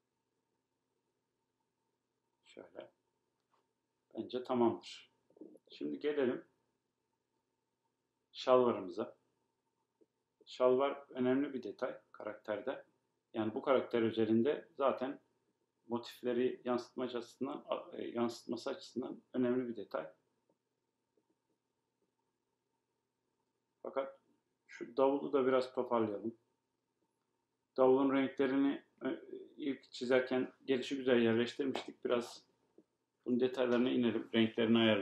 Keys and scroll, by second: 3.9 BackSpace.